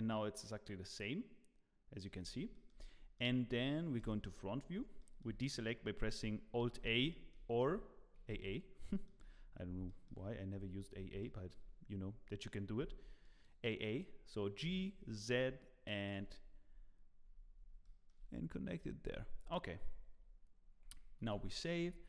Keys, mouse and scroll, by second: 2.2 scroll down 2, 2.5 middle click, 3.1 shift+middle click, 4.0 KP_1, 4.5-4.8 scroll down 3, 5.0 shift+middle click, 6.6 alt+a, 7.1 shift+middle click, 7.6 a, 8.1 a, 8.3 a, 8.8 shift+middle click, 9.2-9.8 scroll up 7, 9.8 shift+middle click, 10.6 z, 10.8 scroll up 2, 11.2 shift+middle click, 12.0-12.7 scroll up 2, 12.9 alt+a, 13.2 click, 14.6 g, 16.6 scroll down 3, 17.2-17.7 scroll up 7, 17.8 shift+middle click, 19.1 Tab, 19.2 scroll down 3, 19.8-20.8 scroll down 6, 21.2 ctrl+s.